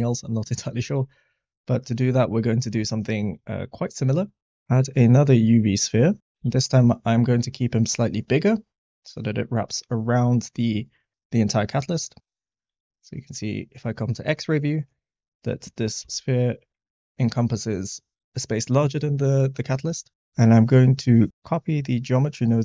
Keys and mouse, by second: 4.5 shift+a, 6.2 s, 6.3 g, 6.4 z, 7.2 click, 8.0-9.5 middle drag, 12.5 click, 16.0 s, 20.3 click, 21.4 click.